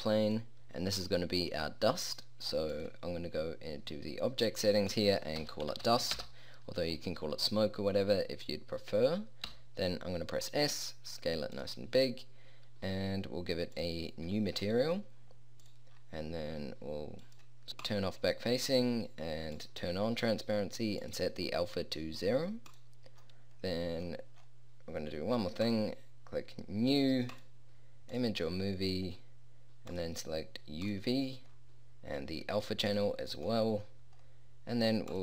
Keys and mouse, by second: 2.3 middle click, 6.9-9.5 middle drag, 9.5 s, 34.7 click.